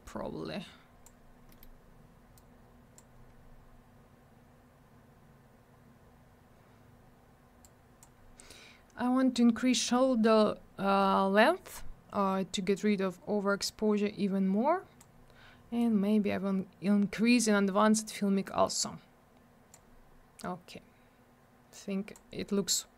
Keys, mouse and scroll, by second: 1.5 middle click, 1.6 middle click, 2.4 click, 7.6 click, 12.8 click, 15.8 click, 21.7 click.